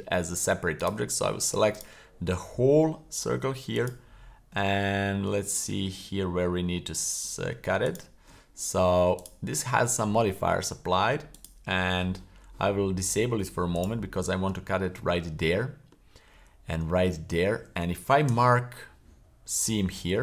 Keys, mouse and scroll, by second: 0.8 right click, 1.7 alt+shift+right click, 3.7 alt+shift+right click, 4.7-5.2 middle drag, 5.3 scroll up 2, 6.0 shift+middle click, 7.2 middle click, 7.8 alt+shift+right click, 9.2-10.3 drag, 11.3 click, 12.9 middle click, 13.7-14.3 alt+shift+right drag, 14.5-14.9 middle drag, 15.5-16.0 shift+middle drag, 16.9-17.7 middle drag, 18.3 w.